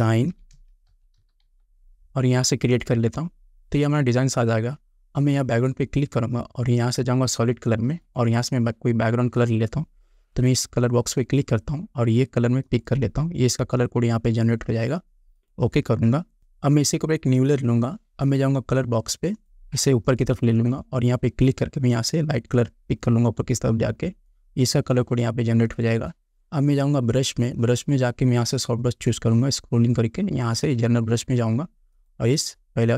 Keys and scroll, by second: 0.0-1.7 typing.